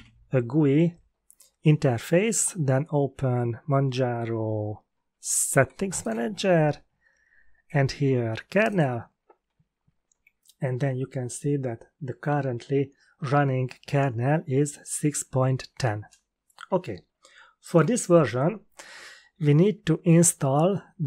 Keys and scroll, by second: 0.0-0.4 typing.